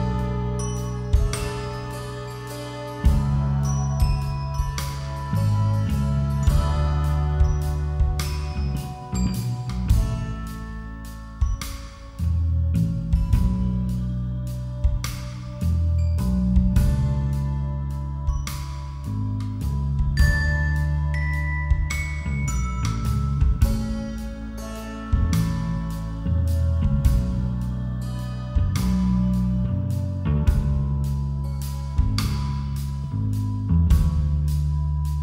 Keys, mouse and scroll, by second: 0.4 z, 1.4-7.1 right drag, 6.6 z, 7.5 x, 8.3 a, 8.6 a, 8.8-10.9 middle drag, 12.2-13.4 middle drag, 13.6-15.3 middle drag, 15.1 a, 16.3 a, 17.7 ctrl+z, 18.1 middle click, 18.4-24.6 right drag, 24.6 middle click, 25.5-26.7 middle drag, 26.7-28.1 right drag, 28.1 middle click, 28.2-29.7 right drag, 29.2 KP_5, 29.5 KP_3, 30.6-31.8 middle drag, 31.5 KP_5, 31.7 KP_3, 32.8 e, 34.7-35.2 middle drag.